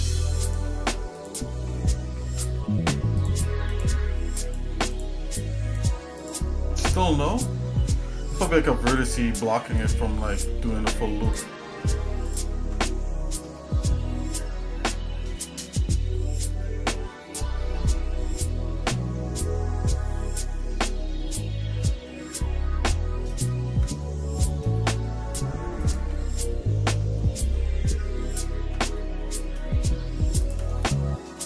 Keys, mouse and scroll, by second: 0.0 shift+click, 0.4 alt+shift+click, 1.3 alt+shift+click, 2.2 ctrl+Tab, 3.7 click, 4.4 alt+shift+click, 4.9 alt+shift+click, 5.9 click, 6.4 click, 7.4 alt+shift+click, 8.4 alt+shift+click, 8.9 alt+shift+click, 9.8 shift+click, 10.6 ctrl+z, 11.2 click, 12.2 ctrl+click, 12.9 shift+middle click, 13.6 middle click, 14.1-14.4 scroll down 2, 14.8 KP_Divide, 15.8 scroll up 1, 15.8 scroll down 1, 16.1 scroll up 2, 16.6 middle click, 17.3 shift+middle click, 18.0 scroll down 1, 18.8-22.1 shift+middle drag, 23.4 ctrl+click, 24.0 shift+scroll up 1, 24.0 shift+middle click, 24.8 middle click, 25.8 ctrl+click, 26.3 shift+middle click, 27.2 scroll up 1, 27.2 middle click, 28.3 ctrl+click, 29.0 shift+middle click, 30.4 ctrl+click, 30.8 shift+middle click.